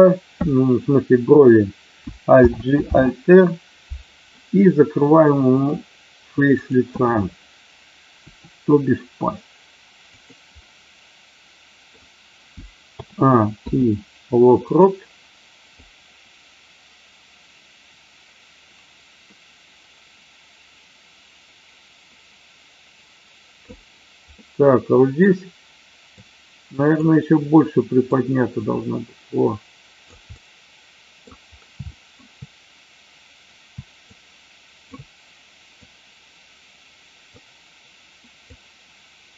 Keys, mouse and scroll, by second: 5.2-5.6 middle drag, 6.6-7.1 drag, 10.6-11.9 middle drag, 12.9 a, 13.6 i, 15.8-23.7 drag, 24.3-25.2 middle drag, 26.1-27.1 drag, 28.1-30.1 drag, 30.2 scroll up 1, 30.4 middle click, 31.8-32.2 shift+middle drag, 34.1-35.1 shift+drag, 35.8-37.3 drag, 38.4-39.3 drag.